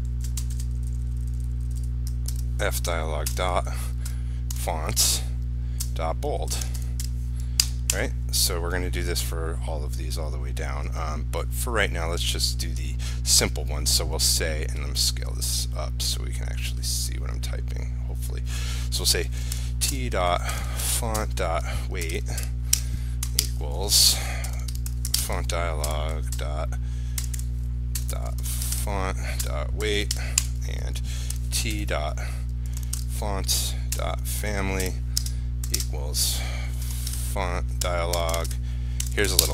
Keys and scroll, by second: 2.5 ctrl+v, 25.4 ctrl+space.